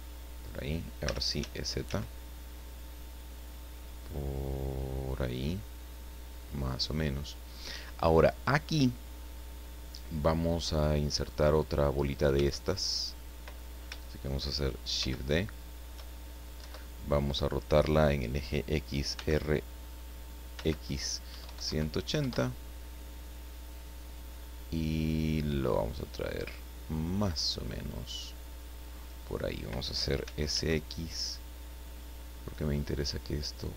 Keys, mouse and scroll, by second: 0.4 click, 1.0 e, 1.4 z, 6.4 click, 12.3 Tab, 12.7 right click, 15.0 shift+d, 16.6 KP_Enter, 19.1 r, 20.5 x, 21.2 KP_1, 21.4 KP_8, 21.6 KP_0, 22.2 KP_Enter, 24.2-29.0 drag, 30.2 s, 30.5 x, 32.6 click.